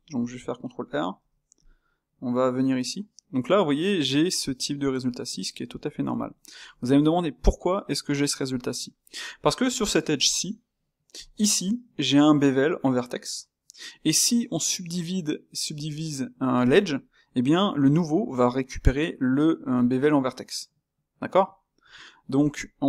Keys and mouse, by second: 1.1 ctrl+r, 5.4-21.8 middle drag, 21.8 Tab, 22.4 alt+click.